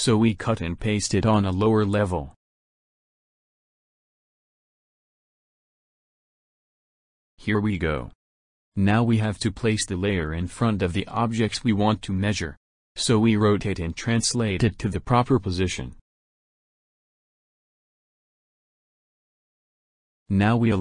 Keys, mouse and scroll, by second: 0.9 right click, 2.5 click, 3.6 click, 4.5 right click, 6.4 click, 9.0-9.9 middle drag, 10.9-13.7 drag, 14.3-16.7 drag, 17.9-18.9 drag, 19.2 middle click, 19.8 scroll down 1.